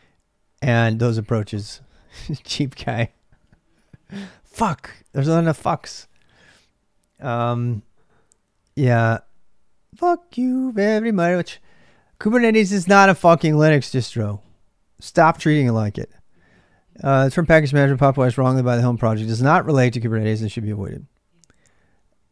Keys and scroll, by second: 0.0-22.3 typing.